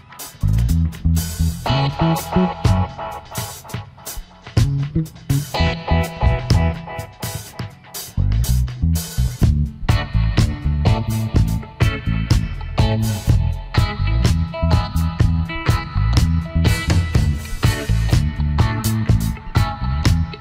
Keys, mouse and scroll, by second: 0.4 ctrl+u, 7.0 ctrl+shift+g, 14.7 alt+scroll down 1, 14.9 space, 15.6 alt+scroll up 1, 16.7 ctrl+z.